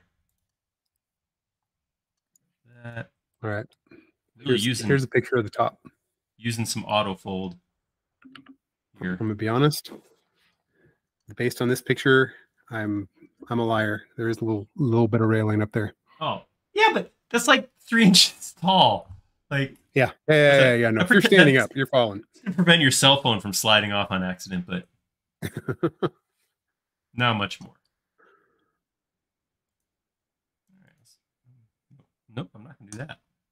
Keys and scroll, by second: 0.9 space, 1.7 m, 3.6 Up, 6.0 space, 30.3 m, 32.1-32.4 typing.